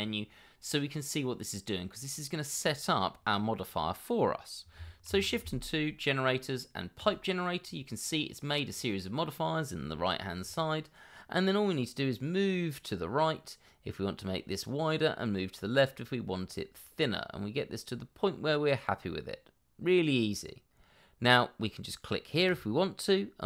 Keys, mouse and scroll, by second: 5.1 shift+2, 23.1 middle click.